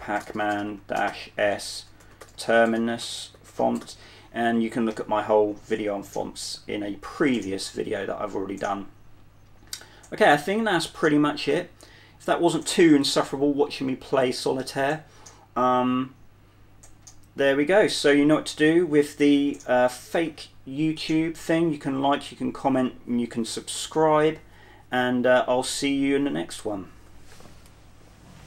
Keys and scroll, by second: 0.0-4.6 typing, 6.4-7.0 typing.